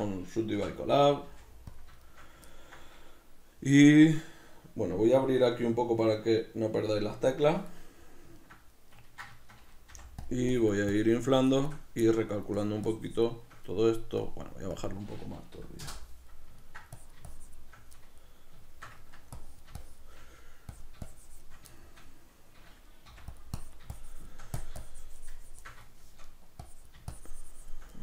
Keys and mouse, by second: 1.9 click, 2.1-5.9 shift+middle drag, 6.3-8.0 drag, 8.0-10.3 middle drag, 10.0 f, 10.6-12.1 drag, 12.1 middle click, 12.6-16.4 shift+drag, 16.4 ctrl+middle click, 17.1-18.1 shift+drag, 18.1-19.5 middle drag, 19.5 click, 20.4 middle click, 20.8-21.9 drag, 21.9-23.5 shift+middle drag, 23.1 f, 23.7-26.0 drag, 26.0 shift+middle click, 26.7-28.0 drag.